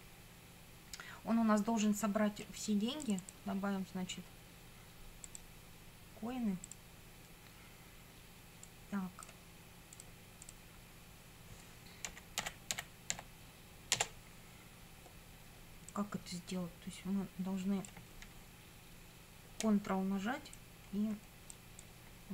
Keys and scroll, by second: 11.8-13.6 typing, 13.9 Return.